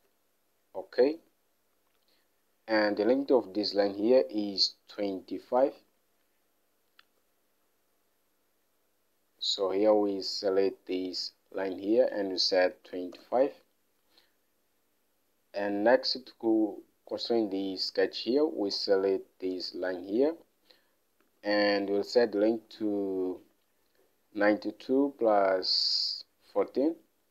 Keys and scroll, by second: 0.3 alt+Tab, 6.3 alt+Tab, 12.8-13.8 typing, 21.6 alt+Tab, 27.1 alt+Tab.